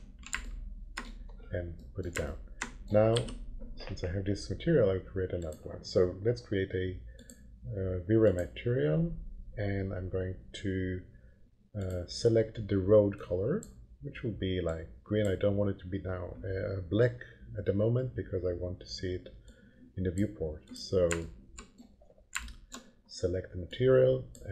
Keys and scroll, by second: 3.1 m.